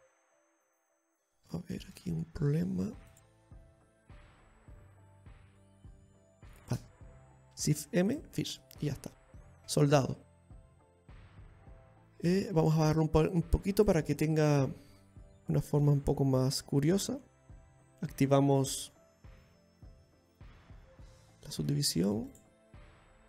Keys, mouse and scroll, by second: 0.2 click, 1.6-2.3 scroll up 3, 2.3 shift+middle click, 2.7-3.2 scroll up 2, 3.8 right click, 3.8-4.7 scroll up 1, 5.0 z, 6.7 right click, 7.3 shift+right click, 8.2 alt+space, 8.3 alt+m, 9.2-10.0 scroll down 5, 10.3 z, 11.6-11.9 scroll down 2, 11.8 middle click, 14.0 click, 15.2 click, 15.2 middle click, 16.3 scroll down 1, 16.5 middle click, 19.5-19.8 scroll up 6, 20.7 click, 21.6 click, 22.0-22.5 scroll down 2, 22.3 middle click.